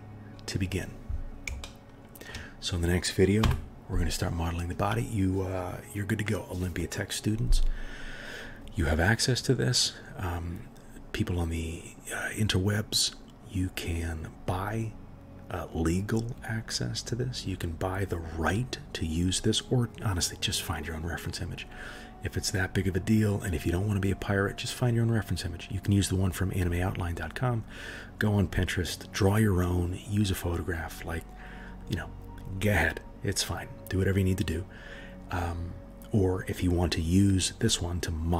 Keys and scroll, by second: 3.4 KP_1.